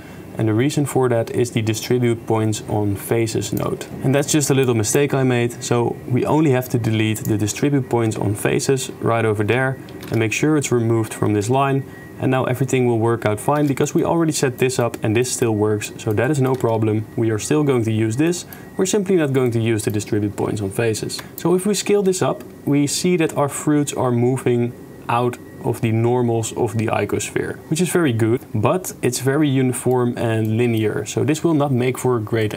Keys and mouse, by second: 0.0 shift+middle click, 0.2-2.7 shift+drag, 2.7 shift+middle click, 3.1 shift+click, 3.9 click, 3.9 shift+space, 4.6 click, 4.9 click, 7.2 click, 8.1 x, 9.3 shift+space, 10.1 shift+space, 11.4 shift+space, 13.6 shift+space, 13.9 click, 14.7 click, 15.3 click, 15.9 click, 16.3 click, 16.6 shift+space, 18.3 click, 19.5 middle click, 21.2 shift+space, 21.4-27.5 shift+drag, 28.0-28.8 middle drag, 29.1-29.9 middle drag, 30.5-30.8 middle drag, 32.4 click.